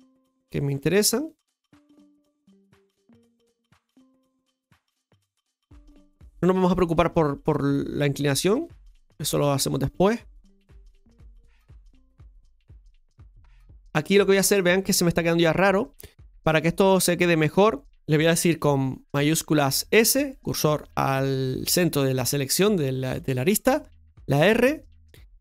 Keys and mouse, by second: 15.5 shift+middle click.